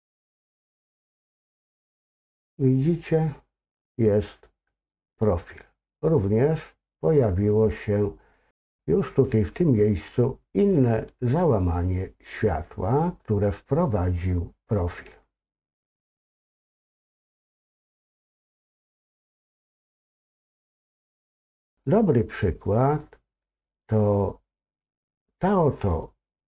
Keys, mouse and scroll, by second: 17.0-20.0 drag, 21.8-24.8 middle drag.